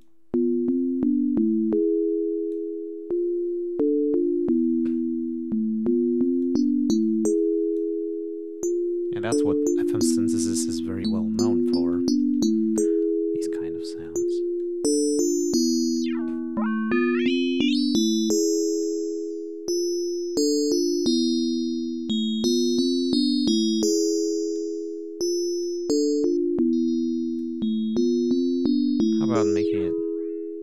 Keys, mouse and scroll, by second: 6.3-7.9 drag, 14.0 click, 14.5-15.8 drag, 15.9-18.9 drag, 19.2 scroll down 2, 22.3-24.7 drag, 25.5-27.5 drag, 29.3-30.6 drag.